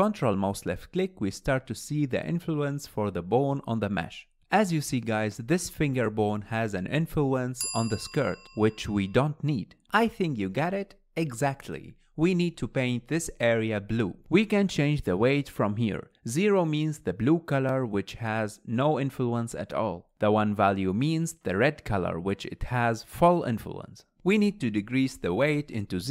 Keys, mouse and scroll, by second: 1.2 ctrl+click, 2.4 ctrl+click, 4.4 ctrl+click, 5.4 ctrl+click, 5.4-15.9 middle drag, 6.9-7.3 scroll up 2, 17.9-20.9 drag, 21.1-24.1 drag, 24.1 ctrl+z, 24.2-26.1 drag.